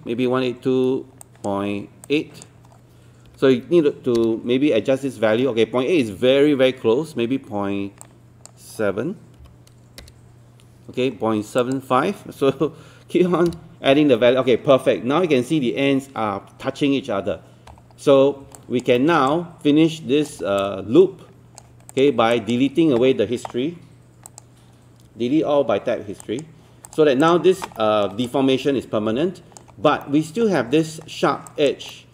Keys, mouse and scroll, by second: 1.2-3.1 drag, 3.3 KP_8, 8.0-9.1 drag, 9.4 KP_7, 11.6 click, 12.6 KP_5, 17.5 scroll down 1, 18.3 scroll up 1, 18.6 alt+click, 19.0 alt+middle click, 19.3 alt+click, 20.6 alt+click, 21.9 click, 22.4 alt+click, 27.8 alt+middle click, 28.3 alt+click, 29.7 scroll up 1, 30.0 alt+middle click, 30.4 scroll up 1, 30.8 alt+middle click, 31.5 alt+click, 31.9 alt+middle click.